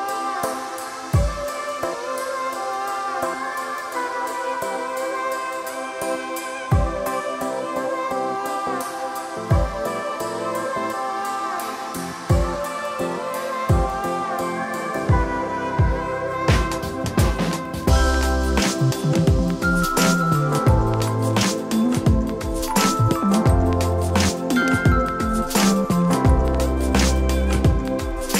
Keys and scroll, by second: 4.0 e, 8.0 s, 11.3 alt+h, 18.5 e, 19.9 s, 24.0 alt+s.